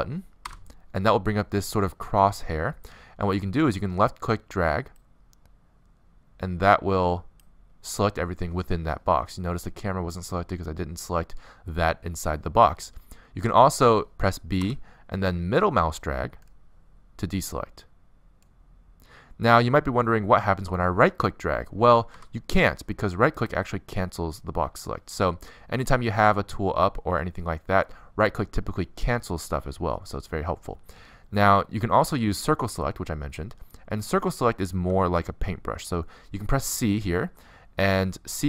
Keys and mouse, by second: 3.3 middle click, 14.8 b, 30.0 a, 35.5 c.